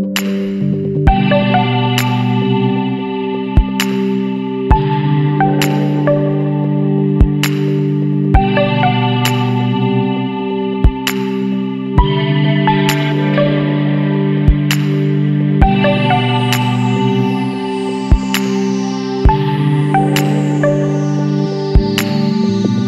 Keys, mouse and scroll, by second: 0.6 Tab, 1.1 click, 2.5 shift+h, 3.1 Tab, 3.8 alt+a, 4.3 alt+shift+click, 5.3 ctrl+x, 6.3 Tab, 7.3 alt+h, 8.0 alt+a, 8.5 click, 9.0 click, 9.4 middle click, 9.7 Tab, 10.5 1, 13.7 middle click, 14.0 Tab, 14.9-18.6 right drag, 18.6-19.0 middle drag, 19.0 Tab, 21.2 click.